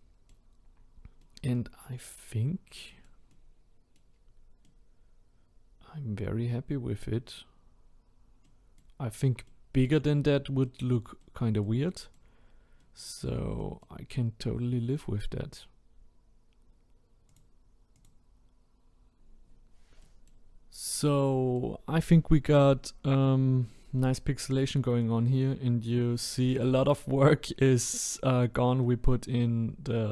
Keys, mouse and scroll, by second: 0.7-1.2 scroll down 1, 1.2-1.8 middle drag, 1.8-2.3 scroll up 2, 2.3-3.3 scroll down 2, 3.3-4.1 middle drag, 4.1-4.7 scroll up 1, 4.7-7.8 middle drag, 7.8-8.4 scroll down 1, 8.4-9.0 middle drag, 9.0-9.5 scroll up 1, 9.5-10.2 middle drag, 10.2-10.7 scroll down 1, 10.7-12.3 middle drag, 12.3-12.8 scroll down 2, 12.8-15.7 middle drag, 15.7-18.0 scroll up 1, 18.0-20.0 drag, 20.0-22.7 middle drag, 22.7-23.3 scroll down 6, 23.3-24.0 scroll up 2, 24.0-25.2 middle drag, 25.2-26.0 scroll up 5, 26.0-28.4 middle drag, 28.4-28.8 scroll up 1, 28.8-30.1 middle drag.